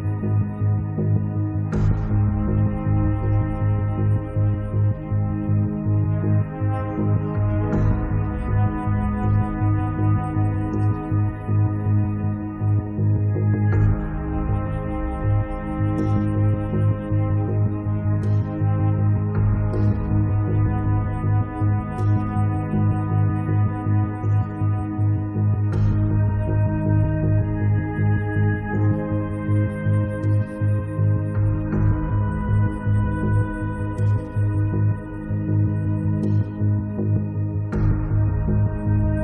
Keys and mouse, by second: 0.2 click, 1.4 middle click, 1.7 click, 3.0 click, 4.2 1, 4.2 click, 5.2 middle click, 5.9 middle click, 6.1-8.9 drag, 7.2-8.2 middle drag, 7.2 right click, 7.4 right click, 8.3 middle click, 8.3 right click, 9.5 middle click, 9.6 click, 9.6 right click, 10.1 middle click, 10.1 right click, 11.2 click, 11.2 middle click, 11.2 right click, 12.1 middle click, 12.3 click, 12.3 right click, 12.8 right click, 13.0 middle click, 13.2-15.0 drag, 13.2 right click, 13.8 right click, 15.1 middle click, 15.2-20.4 drag, 15.2 right click, 18.9 middle click, 19.4 right click, 19.7 middle click, 19.8 right click, 20.0 middle click, 20.5 click, 21.0 middle click, 21.3 middle click, 21.4 8, 21.9-24.8 drag, 24.8 1, 25.0 click, 26.0 8, 26.1-27.6 drag, 27.6 middle click, 27.8 click, 28.8 ctrl+s, 29.7 ctrl+s, 30.0 middle click, 30.8 click, 31.2 alt+F3, 31.5 click, 32.8 click, 33.6 click, 34.2 click, 34.9 click, 35.8 middle click, 35.9 click, 35.9 right click, 36.6 click, 36.7 middle click, 36.8 right click, 37.4 click, 38.0 right click, 38.2 middle click, 38.9 8, 39.1 middle click.